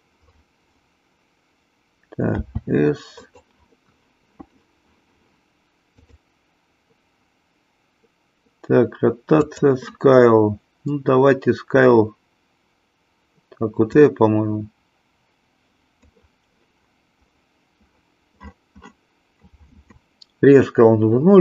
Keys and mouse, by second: 2.3 s, 6.0 click, 9.3 click, 14.0-16.1 drag.